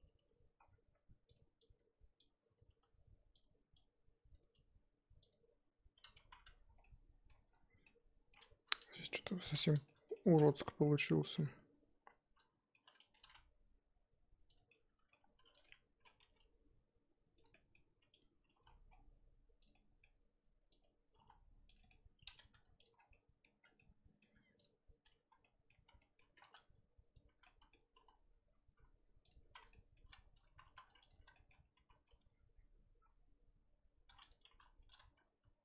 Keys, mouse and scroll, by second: 0.2 g, 1.7 click, 2.5 click, 2.7 g, 4.3 click, 4.4 g, 6.3 z, 6.4 Tab, 6.8-7.5 middle drag, 7.5-7.8 scroll down 3, 7.8-8.4 middle drag, 8.4-8.7 scroll up 2, 8.7 KP_3, 9.0-10.4 middle drag, 10.4 Tab, 10.6 middle click, 10.8 scroll up 2, 11.2 scroll down 1, 11.3-13.2 middle drag, 13.2 s, 14.7-15.3 middle drag, 15.3 2, 15.5 click, 15.6-16.1 middle drag, 16.1 g, 17.5 middle click, 18.2 click, 18.4 g, 19.7-20.8 middle drag, 20.8 click, 21.1 g, 21.9-22.5 middle drag, 22.5 Tab, 22.9 scroll down 4, 23.1-23.4 middle drag, 23.4 scroll up 1, 23.6 scroll down 1, 23.7-24.3 middle drag, 24.3 scroll up 3, 24.5 click, 25.0 Tab, 25.0-25.4 scroll up 2, 25.4 middle drag, 25.7 z, 26.0-26.4 middle drag, 26.4 1, 27.1 click, 27.3 z, 27.4-27.9 middle drag, 27.9 s, 29.5 z, 29.7-30.1 middle drag, 30.1-30.6 scroll up 1, 30.6 3, 31.1 alt+click, 31.3-31.7 shift+middle drag, 31.7 s.